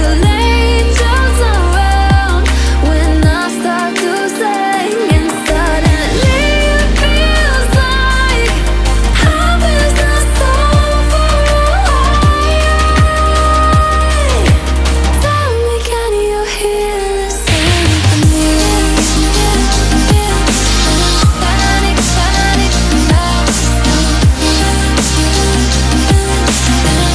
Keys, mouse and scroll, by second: 0.0-10.7 typing, 10.7-11.3 alt+scroll up 2, 11.3 click, 12.2 space, 12.5 click, 13.0 space, 13.4 click, 13.7 space, 14.7 click, 15.0 ctrl+a, 15.4 click, 16.4-16.8 alt+scroll down 2, 16.9 shift+click, 18.9-19.9 drag, 19.9 alt+scroll down 1, 20.1-20.7 alt+scroll up 1, 20.7 click, 21.6 click, 24.2 alt+scroll down 1, 24.5 alt+scroll up 1, 25.8 alt+scroll up 1, 26.0 alt+click.